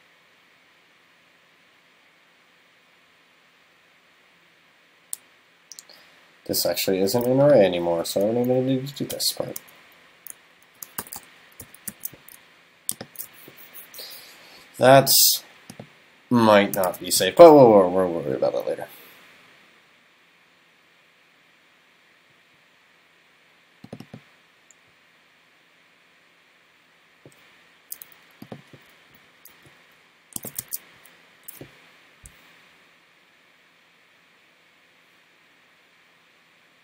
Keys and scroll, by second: 8.0 super+Right, 9.1 shift+super+Left, 10.7 alt+shift+Left, 16.9 super+s, 17.5 super+s, 30.7 super+s, 31.4 super+s.